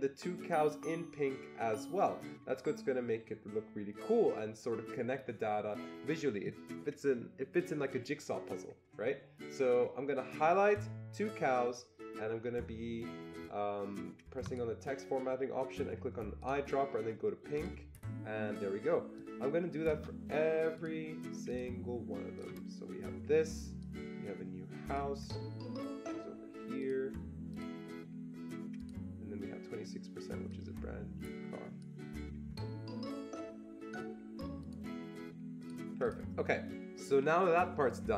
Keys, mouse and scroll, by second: 14.5 Escape, 14.5-16.4 drag, 16.4-17.5 drag, 17.5-19.1 drag, 19.1-21.5 drag, 21.5-22.6 drag, 22.6 click, 24.1-27.5 drag, 27.5-28.8 drag, 28.8 click, 30.5-34.6 drag, 34.6-35.6 drag, 35.6 click, 36.0 click.